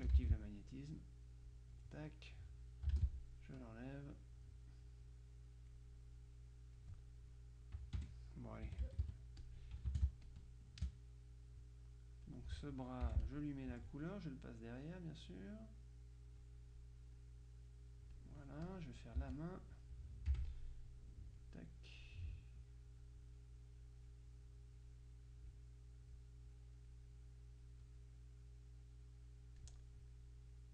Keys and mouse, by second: 1.1-2.3 drag, 3.8-4.8 drag, 5.1-6.3 drag, 8.1 F1, 9.5 KP_Subtract, 9.5 click, 10.0 space, 10.4 click, 11.3 space, 12.4 click, 13.2 F7, 13.3 click, 13.9 F1, 14.8 click, 16.5-17.9 drag, 18.3-19.3 drag, 19.3 z, 19.5 click, 20.4 F6, 21.2 click, 23.1 click, 24.5 click, 25.4 click, 25.9 click, 26.5 click, 27.4 click, 28.1 click, 30.3 click.